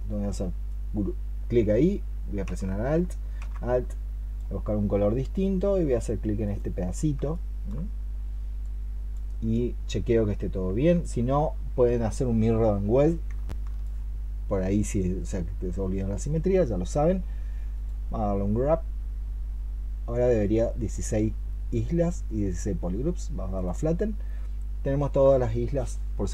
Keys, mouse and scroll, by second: 7.2 alt+click, 13.3 alt+click.